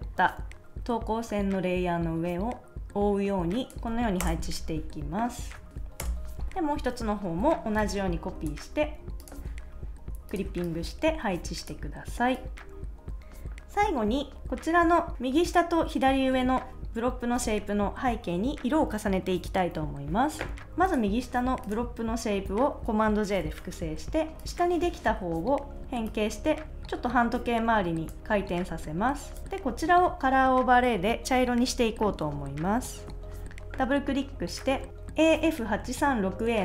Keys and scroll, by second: 4.2 Return, 6.0 Return, 7.4 super+j, 12.8 super+s, 23.4 super+j, 29.4 super+s.